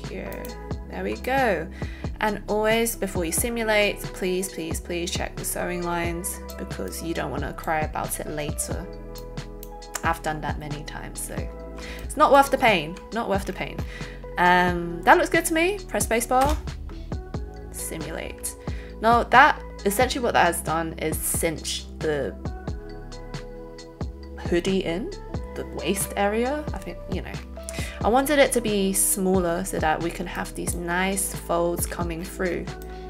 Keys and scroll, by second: 16.6 space.